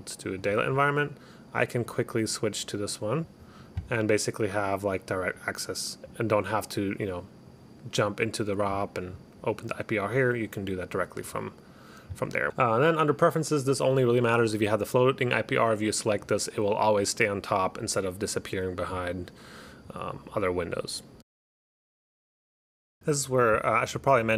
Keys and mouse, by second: 0.5 click, 1.9 click, 8.2 click, 12.5 click, 14.4 click, 15.3 click, 16.3 click.